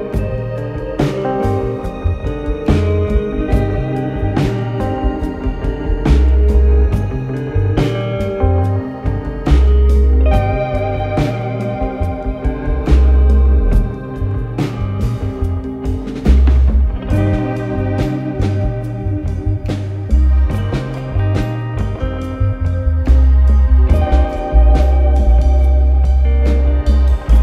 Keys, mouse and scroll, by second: 0.6 click, 1.6 click, 2.5 n, 3.6 click, 5.2 click, 5.4 click, 5.8-6.7 typing, 8.0 click, 8.2 click, 8.5-14.9 typing, 16.4 click, 17.0 click, 17.2 click, 17.9 typing, 18.4-19.7 Return, 21.3 alt+scroll, 22.3 click, 25.4 alt+scroll, 26.2 click, 27.2 click.